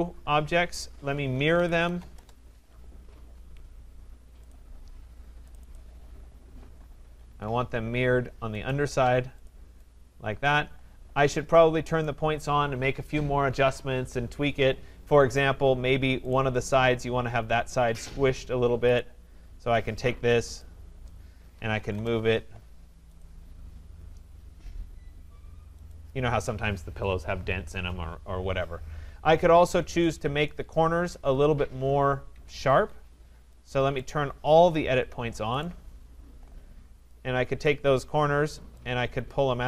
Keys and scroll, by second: 2.1 Return, 21.9 Return, 32.3 Escape.